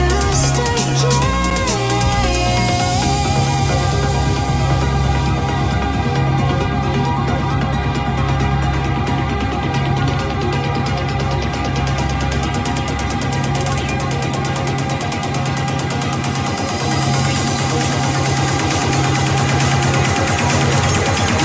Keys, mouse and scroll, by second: 7.2 n, 8.5 click, 9.6 KP_4, 12.3 click, 18.7 KP_0.